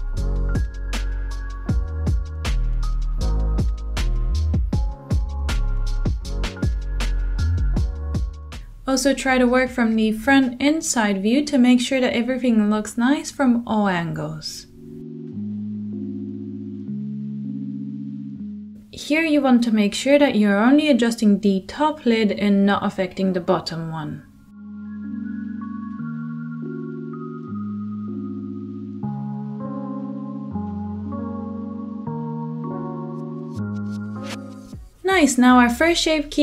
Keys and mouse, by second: 0.0 f, 0.6 middle click, 0.8-9.2 drag, 8.4 ctrl+z, 8.8 f, 9.2-11.0 middle drag, 10.2 f, 11.0-13.6 drag, 13.2 f, 13.6-15.5 middle drag, 14.8 f, 15.5-23.0 drag, 19.8 middle click, 22.8 f, 23.0 middle click, 23.1-27.7 drag, 26.7 ctrl+z, 26.9 ctrl+z, 27.5 f, 27.7 middle click, 27.9-29.0 drag, 29.0 middle click, 29.1-36.4 shift+drag, 32.1 f, 33.2 Tab, 34.2 Tab, 34.7 ctrl+z, 35.0 f, 35.0 middle click.